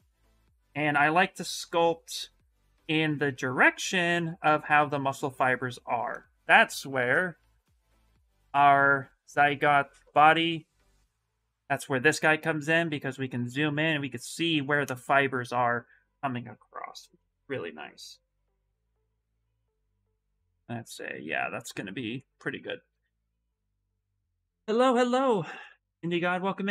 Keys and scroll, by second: 6.9 alt+Tab, 7.7 alt+Tab, 8.0 alt+Tab, 8.2 alt+Tab, 8.6 alt+Tab.